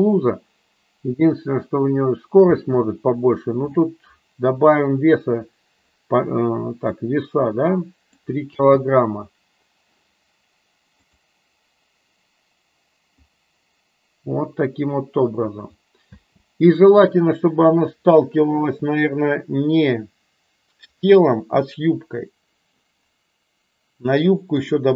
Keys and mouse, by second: 2.8 space, 6.9-8.0 drag, 8.5 space, 11.4 click, 16.2 space, 20.9 click, 24.5 click.